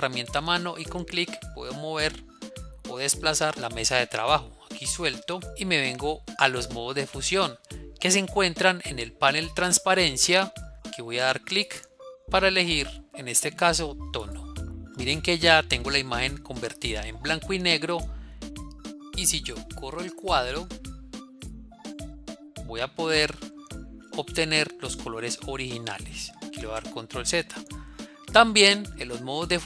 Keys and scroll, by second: 26.3 ctrl+z.